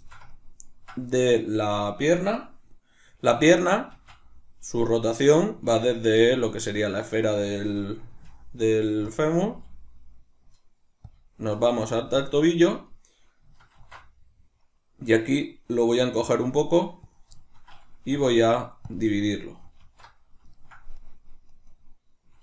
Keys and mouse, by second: 0.0-6.1 ctrl+shift+middle drag, 3.9 shift+d, 6.1 right click, 7.1-9.1 shift+middle drag, 8.1 g, 9.1 click, 9.5 g, 11.2 shift+click, 11.8 middle click, 11.8 g, 12.3 click, 12.6 right click, 17.2 click, 17.4-21.0 shift+middle drag, 18.1 w, 21.0 right click, 21.5 right click, 21.7 right click.